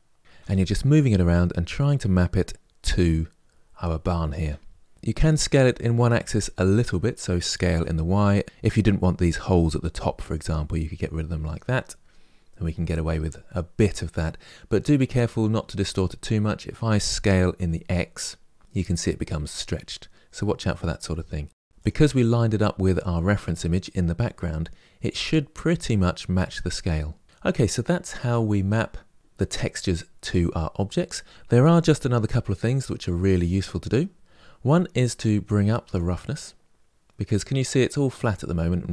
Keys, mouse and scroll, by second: 0.3 g, 1.5 g, 4.9 s, 7.0 s, 8.9 g, 13.7-14.1 scroll up 4, 14.4-17.3 middle drag, 17.3 s, 22.1-22.5 scroll down 2, 27.2-35.9 middle drag, 35.9-38.6 drag.